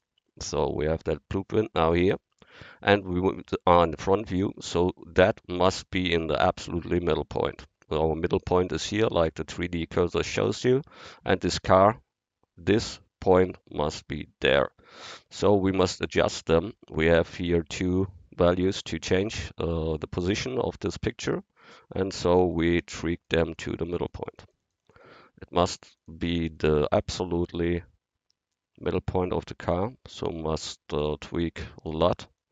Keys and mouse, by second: 0.0-1.8 drag, 3.2 middle click, 5.3 click, 22.8 click, 26.1 click, 27.3 middle click, 28.2-29.3 middle drag.